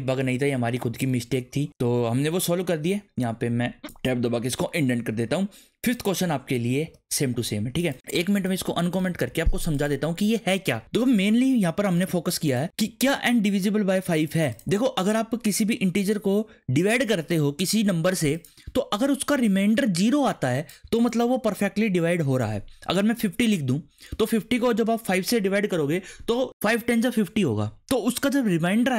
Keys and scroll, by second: 0.0 Left, 0.2 /, 1.0 BackSpace, 2.1 Caps_Lock, 3.1 Caps_Lock, 3.4 Tab, 6.9 Return, 9.1 ctrl+/.